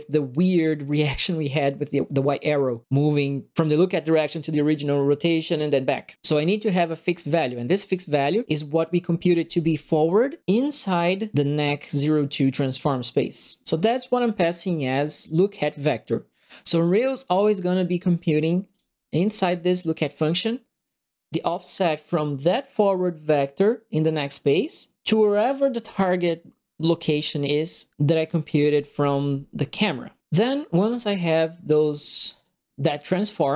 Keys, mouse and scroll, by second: 7.9 click, 17.7 right click, 18.7 click, 19.2 click, 28.4 right click, 29.9 click, 31.2-32.4 right drag.